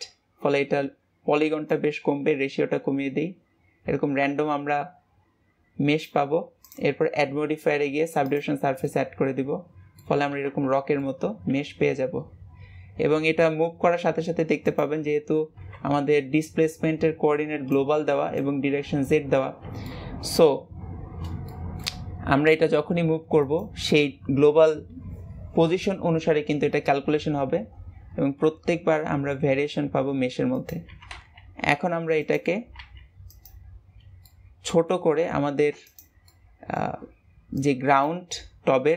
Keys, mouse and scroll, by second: 1.6-4.7 drag, 6.6-8.8 drag, 8.8-10.3 middle drag, 10.3 ctrl+s, 10.7-11.5 shift+middle drag, 11.5 g, 19.8-21.9 middle drag, 21.9-22.3 scroll up 1, 22.3 g, 27.8-28.3 scroll down 2, 28.3-28.9 scroll up 3, 28.9-29.6 middle drag, 29.6 g, 34.0 scroll up 1, 34.3-35.1 middle drag, 35.1 g, 36.2-37.5 middle drag, 37.5 click, 38.8 click.